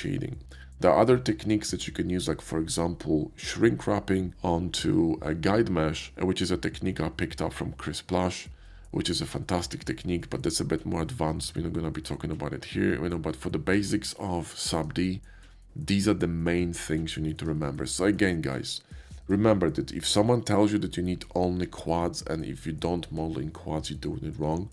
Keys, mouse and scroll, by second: 12.0-13.7 middle drag, 14.2-14.9 middle drag, 17.3 middle click, 18.2-19.2 middle drag.